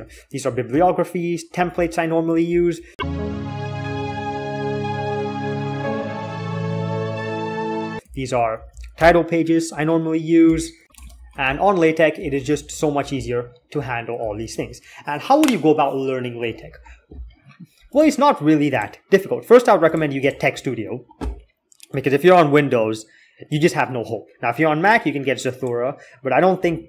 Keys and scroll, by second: 0.0-2.9 typing, 7.7-11.3 typing, 12.0 Escape, 12.4 ctrl+s, 13.0 k, 13.2-13.5 k, 14.1 alt+2.